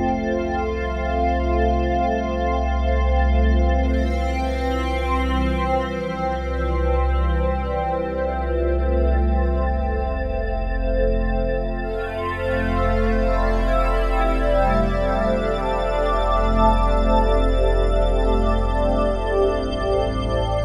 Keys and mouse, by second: 0.0 -, 0.1 -, 0.8 click, 1.7 ctrl+z, 2.3 ctrl+z, 2.8 click, 4.7-7.2 drag, 7.5 click, 8.5 ctrl+click, 8.9 ctrl+c, 9.6 click, 11.7-14.5 alt+drag, 14.5 ctrl+v, 15.4 Return, 17.8-18.7 drag.